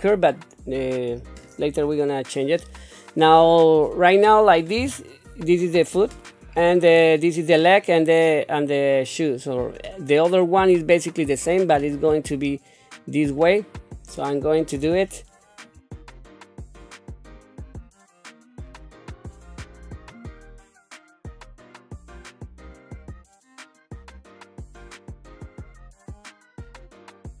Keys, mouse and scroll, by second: 4.7 KP_7, 6.0 shift+middle click, 14.9 shift+middle click, 15.9 click, 16.0-19.6 typing, 16.8 Tab, 17.3 click, 18.2 click, 18.4 shift+middle click, 18.6 Tab, 18.7 Tab, 18.8 click, 19.5 Tab, 19.6 click, 19.8 click, 19.9 middle click, 20.4 ctrl+KP_3, 20.5 Tab, 20.6 click, 20.7-25.1 typing, 20.7 click, 21.2 click, 22.0 click, 22.4 click, 22.6 shift+middle click, 22.7 click, 23.3 Tab, 23.4 click, 23.4 middle click, 23.6 Tab, 23.9 click, 24.2 click, 24.6 Tab, 24.9 Tab, 25.0 click, 25.2 middle click, 25.5 Tab, 25.5 Tab, 25.7 click, 25.9 middle click, 26.3 click, 26.4 middle click, 26.5 scroll down 1, 26.5 middle click, 26.8-27.4 typing, 26.9 Tab, 27.2 click.